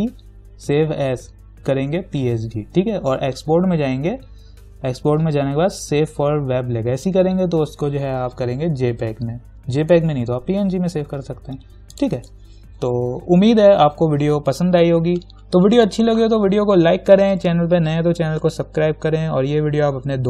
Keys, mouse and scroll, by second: 12.1 click.